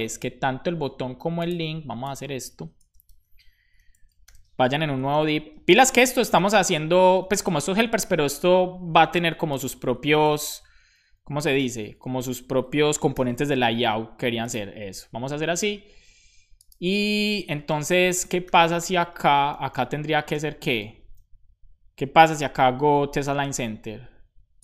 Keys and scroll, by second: 2.7 Return, 3.6-7.6 typing, 5.0 Return, 7.6 Up, 7.8 Return, 9.9 super+Right, 11.4 super+x, 11.7 Up, 12.1 super+v, 13.4 super+s, 14.9 super+Left, 18.1-20.2 typing, 22.7-23.7 typing, 24.5 Return.